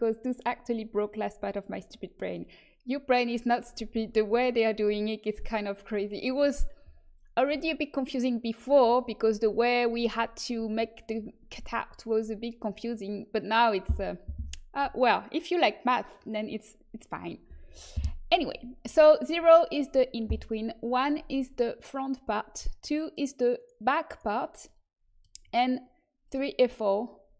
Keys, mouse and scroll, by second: 23.5-24.6 right drag, 24.6-26.6 middle drag.